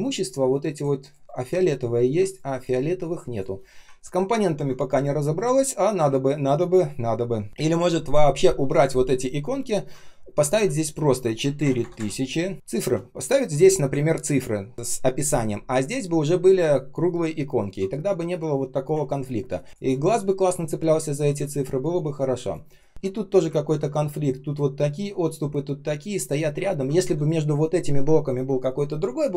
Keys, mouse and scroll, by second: 1.2 ctrl+shift+3, 1.5-2.0 ctrl+scroll down 1, 2.4 space, 2.9 space, 3.9-4.4 ctrl+scroll up 1, 6.1-6.7 ctrl+scroll up 1, 6.7 ctrl+shift+3, 7.5 ctrl+scroll down 1, 7.6-8.6 ctrl+scroll up 1, 14.1 shift+click, 19.0-19.5 ctrl+scroll up 1, 19.7 space, 21.3 space, 21.8 space, 21.8 space, 22.9-23.3 ctrl+scroll down 1, 23.5 ctrl+scroll up 1, 26.5-26.9 ctrl+scroll down 1, 26.9 r.